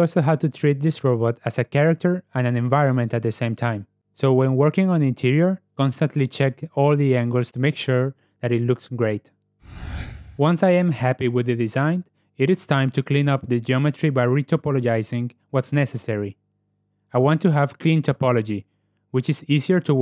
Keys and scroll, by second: 4.8 KP_0, 10.6 ., 12.2 /, 14.0 Tab, 14.4 ctrl+w, 15.7 Tab.